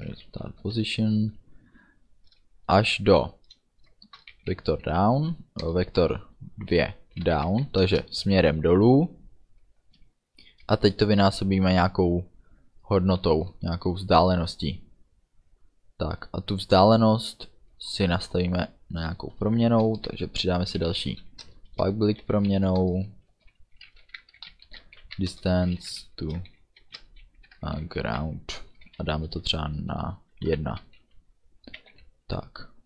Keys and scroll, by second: 0.5 ', 0.7 space, 4.1 shift+v, 4.4 e, 5.7 Return, 6.8 ., 7.2 d, 7.5 w, 7.9 Return, 9.9 space, 10.5 KP_Multiply, 10.8 space, 20.1 Return, 20.8 p, 21.0 u, 21.5 Return, 22.0 space, 22.3 f, 22.9 Return, 23.4-27.9 typing, 28.9 space, 29.1 =, 29.2 space, 30.6 1, 31.9 f, 32.0 ů.